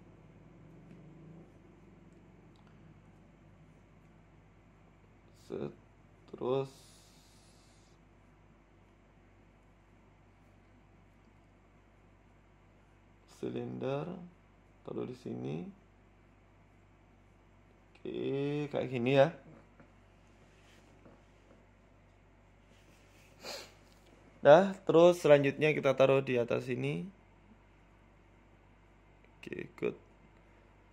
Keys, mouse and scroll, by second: 1.0 middle click, 2.2 click, 2.9 right click, 3.5 shift+right click, 3.9 middle click, 4.5 shift+right click, 4.8 middle click, 5.4 shift+right click, 5.6 middle click, 6.8 click, 7.6 click, 9.6 Tab, 9.8 middle click, 11.0 KP_1, 11.9 shift+middle click, 12.9 shift+a, 14.9 scroll down 1, 15.6-16.2 scroll down 2, 15.6 g, 16.2 s, 16.9-17.2 scroll up 4, 17.1 shift+middle click, 17.6 g, 18.9 s, 20.6 shift+middle click, 20.9 scroll down 4, 21.6 scroll down 1, 22.5 scroll down 1, 22.7 scroll up 1, 22.9 shift+middle click, 23.1 Tab, 23.7 click, 24.4 g, 26.1 ctrl+r, 28.0 scroll up 3, 28.2 shift+middle click, 30.0 g.